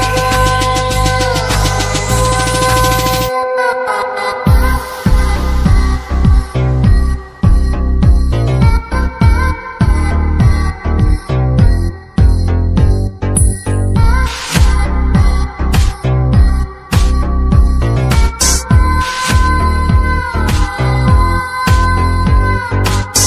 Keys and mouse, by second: 2.3 click, 5.5 n, 7.2 x, 8.4 shift+a, 13.1 typing, 14.2-14.9 drag, 15.9 click, 17.6 click, 18.0 click, 18.3 shift+a, 22.7 click.